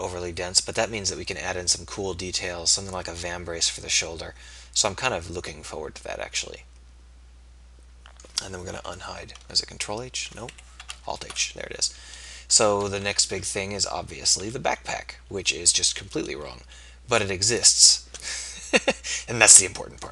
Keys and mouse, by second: 9.5 ctrl+h, 11.0 alt+h, 13.1 KP_3, 14.5 z.